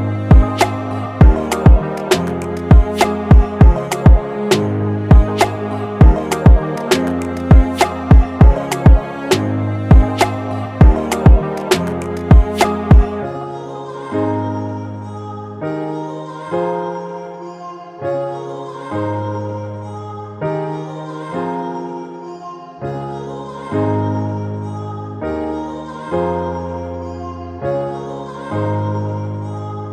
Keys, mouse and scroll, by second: 2.1 double click, 4.8-5.6 typing, 7.3-8.0 typing, 12.8 typing, 14.8 double click, 22.7 double click.